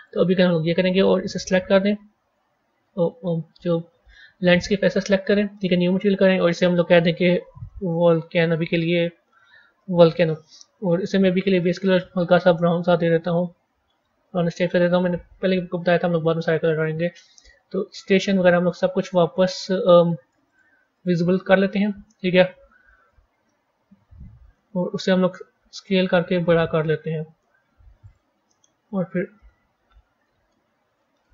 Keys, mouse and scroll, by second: 3.7-4.5 scroll down 4, 4.5 click, 5.5-6.3 drag, 6.4-9.5 drag, 11.8 click, 15.1-16.6 scroll down 9, 16.6-17.8 scroll up 4, 17.8 click, 18.2 click, 18.9 click, 19.8 click, 20.4 click, 20.8 click, 21.3-21.9 scroll down 8, 23.4-25.1 middle drag, 25.1 s, 29.3-31.2 middle drag, 31.2 g.